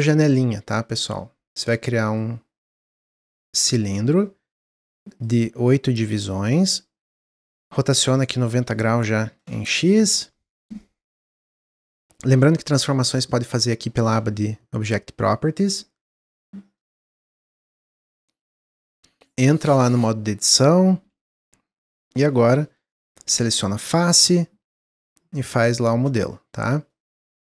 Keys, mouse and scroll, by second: 1.6-4.7 drag, 5.1-6.2 drag, 8.3-10.8 drag, 11.7-12.1 shift+scroll up 1, 12.1-13.2 middle drag, 13.2 click, 17.7 middle click, 17.9 scroll up 2, 18.3 middle click, 18.4-18.8 scroll down 1, 19.0 middle click, 19.8 Tab, 20.9 s, 22.5 click, 23.9 s, 25.5-26.9 drag, 26.9-27.5 middle drag.